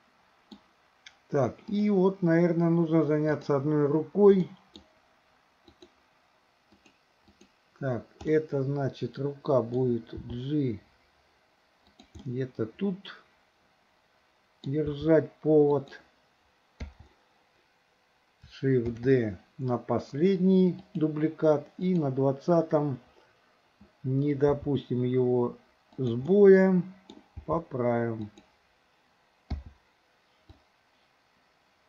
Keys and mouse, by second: 1.8 click, 3.3 click, 4.5 middle click, 5.8 click, 6.7 click, 7.4 click, 8.3-9.8 middle drag, 10.3 g, 12.2-14.8 middle drag, 14.9 g, 16.9 i, 18.9 shift+d, 21.9 click, 24.6 g, 26.3-27.2 middle drag, 27.4 g, 29.6 i, 30.7-31.8 drag.